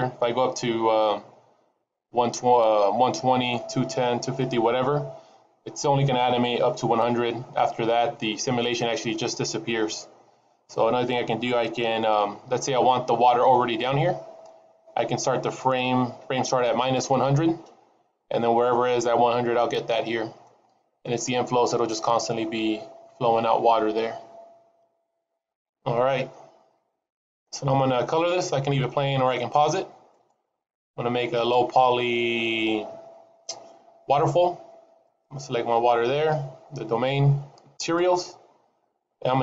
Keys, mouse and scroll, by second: 20.8 middle click, 26.0-27.2 scroll up 4, 27.2-28.2 scroll down 5, 30.6 click, 34.9 click, 37.7 click.